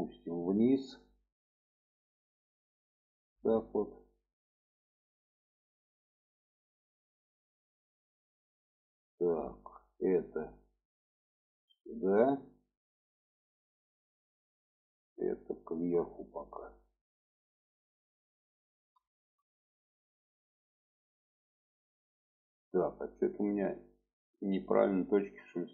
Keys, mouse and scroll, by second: 0.0-3.2 drag, 3.8 shift+middle click, 4.9 shift+middle click, 9.2 click, 11.6-14.1 drag, 14.6-15.0 drag, 15.9-17.4 drag, 18.1 shift+middle drag, 19.1 shift+middle click, 22.8-23.3 drag.